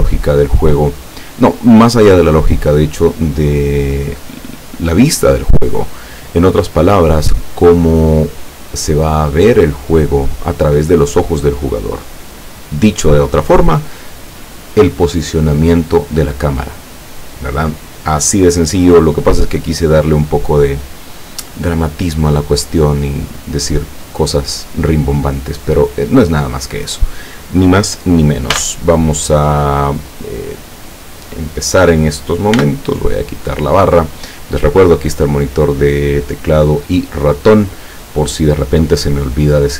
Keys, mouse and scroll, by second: 28.5 n, 30.9 click, 32.6 n.